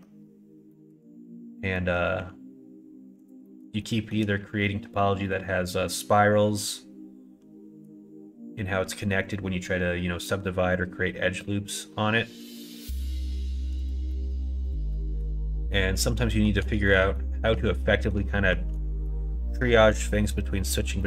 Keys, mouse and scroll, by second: 0.7 middle click, 1.7 middle click, 2.1 s, 3.4 middle click, 3.8 middle click, 4.1 right click, 13.8 click, 14.1 middle click, 14.6 click, 14.9 middle click, 15.7 middle click, 16.2 shift+middle click, 16.7 middle click, 17.1 shift+middle click, 17.8 middle click, 18.3 shift+middle click, 18.8 middle click, 20.9 middle click.